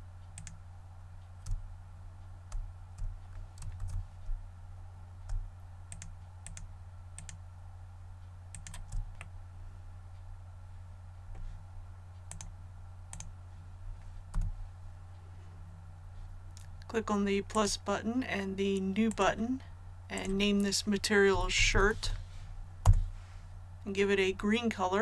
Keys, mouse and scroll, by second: 3.7 ctrl+z, 5.8 shift+right click, 7.1 shift+right click, 8.4 shift+right click, 9.2-12.1 middle drag, 12.3-14.1 drag, 14.3 a, 17.5-20.1 drag, 21.3-22.0 typing, 22.8 Return.